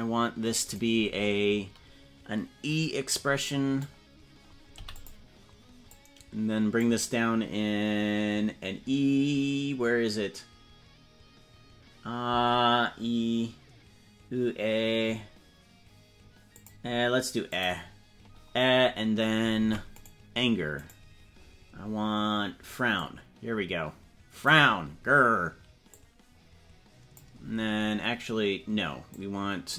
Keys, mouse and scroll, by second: 3.1 click, 5.9-6.9 drag, 11.2-11.7 scroll up 3, 16.5 click, 17.5 click, 19.5 ctrl+Tab, 19.9 right click, 20.8 right click, 22.9-24.5 drag, 26.1-27.3 drag, 29.1 click.